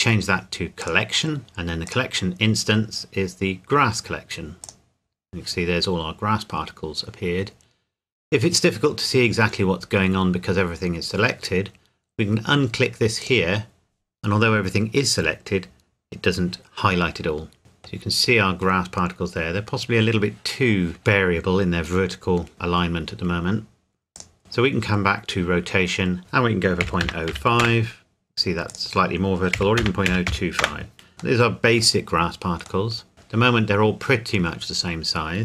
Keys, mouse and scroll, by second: 1.4-1.9 scroll down 1, 1.9 click, 4.6 click, 13.2 click, 15.7 scroll up 1, 17.6 middle click, 18.1-18.6 scroll down 1, 24.1 click, 26.8 KP_Decimal, 27.0 KP_0, 27.3 KP_5, 27.6 KP_Enter, 28.7 click, 29.5 KP_Decimal, 29.8 KP_0, 30.1 KP_2, 30.3 KP_5, 30.6 KP_Enter, 31.1 scroll down 1, 31.4 middle click, 32.0-32.9 scroll up 1, 32.9 middle click.